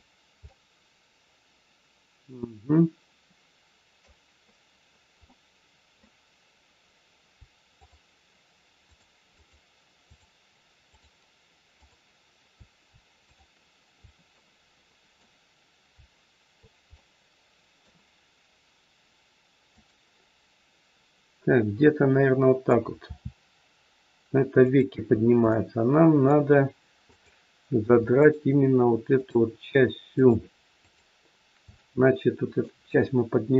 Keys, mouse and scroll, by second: 0.4 middle click, 5.2 middle click, 6.7-7.3 scroll down 2, 7.7 shift+click, 10.0 shift+click, 12.4 shift+click, 13.8 shift+click, 14.3 middle click, 16.9 middle click, 19.7 click, 21.8 middle click, 22.9 r, 25.1-25.5 scroll up 2, 25.5 middle click, 26.9 click, 28.1 shift+click, 30.1 shift+click, 31.6 shift+click, 31.7 middle click.